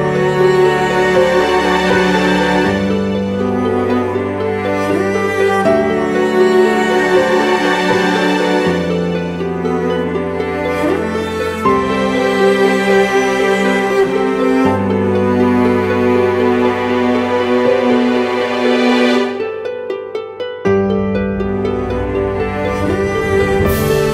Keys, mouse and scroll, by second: 2.2-2.9 typing.